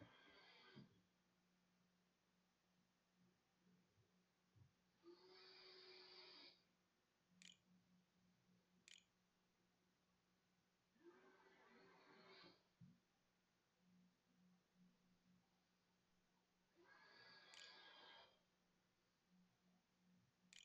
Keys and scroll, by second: 6.1 Left, 6.4 Home, 7.2 BackSpace, 7.7 Delete, 7.8 Return, 9.2 shift+Return, 9.4 shift+\, 9.6 shift+-, 13.3 shift+0, 14.3 shift+9, 14.9 shift+8, 16.4-17.9 typing, 18.9-20.2 typing.